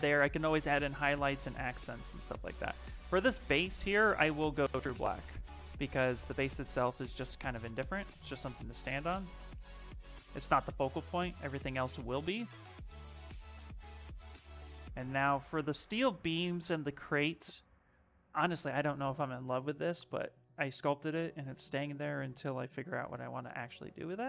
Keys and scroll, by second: 15.2 shift+f, 15.7 shift+f, 19.2 shift+f.